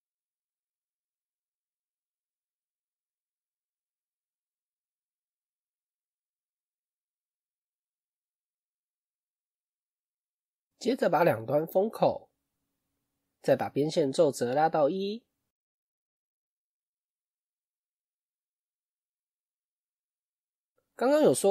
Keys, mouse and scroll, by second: 0.9-1.2 scroll down 1, 1.2 click, 2.2 alt+click, 2.5 scroll up 1, 2.5 middle click, 3.1-3.8 scroll down 1, 3.8 alt+shift+click, 4.8 click, 5.2 middle click, 5.9 alt+click, 7.0 alt+shift+click, 11.4-14.4 middle drag, 15.1-16.9 drag, 16.9-20.0 middle drag, 20.0 Tab.